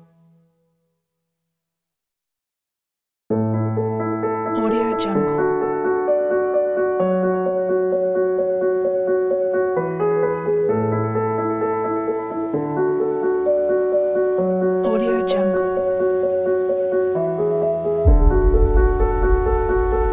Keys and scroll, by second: 1.6 u, 18.0 u.